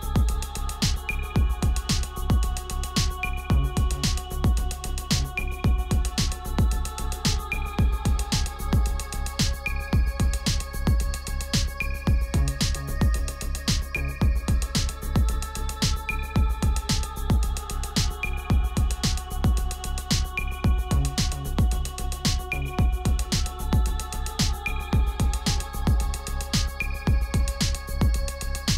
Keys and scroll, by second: 7.0 ctrl+t, 8.6 Return, 14.1 ctrl+t, 15.3 Return, 20.9 ctrl+t, 24.4 Return, 25.0 space, 25.5 space, 28.3 ctrl+t.